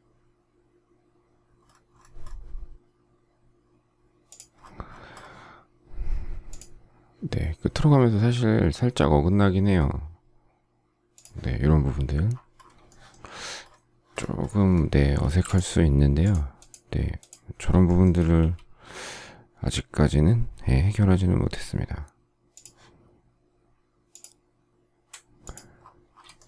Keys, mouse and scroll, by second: 12.8 shift+middle click, 13.3 shift+scroll, 15.2 space, 17.8 shift+middle click, 18.3 o, 26.3 shift+middle click.